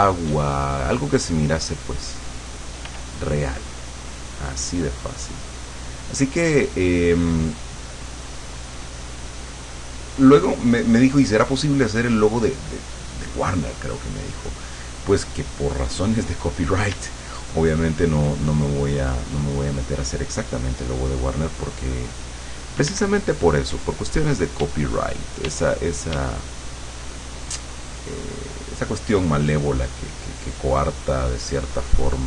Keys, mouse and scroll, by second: 0.3 d, 0.5-2.7 drag, 2.9 f, 3.2-10.1 drag, 13.3 click, 14.5 click, 17.0 d, 17.3-18.5 drag, 18.6 click, 19.4 click, 22.9 d, 23.3 click, 23.7 d, 24.0 click, 24.6 d, 24.9 click, 25.3 click, 25.5 d, 26.0 click, 28.5 click, 29.5 click, 30.7-32.2 drag.